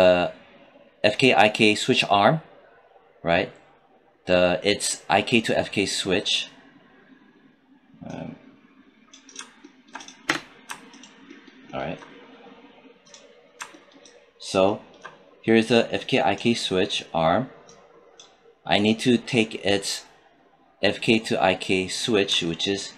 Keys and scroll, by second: 10.1 space.